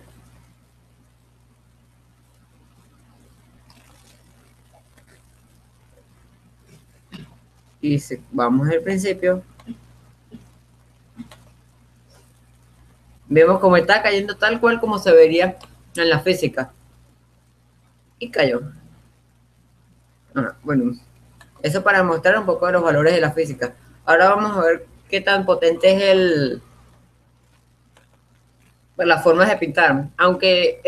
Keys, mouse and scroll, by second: 0.4-2.0 drag, 3.7 middle click, 4.4-5.9 right drag, 5.9-7.9 middle drag, 7.9-9.3 right drag, 9.3-11.7 drag, 11.9-13.3 drag, 14.4 middle click, 15.0-17.8 middle drag, 22.0-23.8 drag, 23.8-26.9 middle drag, 28.5-29.8 drag, 30.7 click.